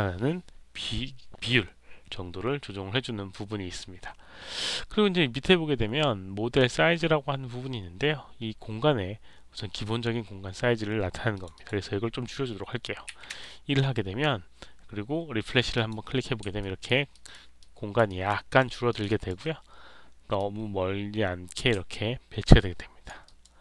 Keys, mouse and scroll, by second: 11.2 click, 11.4 click, 15.7 click, 16.5 alt+right click, 17.0 alt+right click, 17.5 alt+click, 18.0 alt+right click, 18.5 alt+middle click, 18.8 alt+click, 19.0 alt+right click, 20.3-21.5 drag, 21.8-23.0 alt+drag, 23.2 alt+right click, 23.5 alt+click.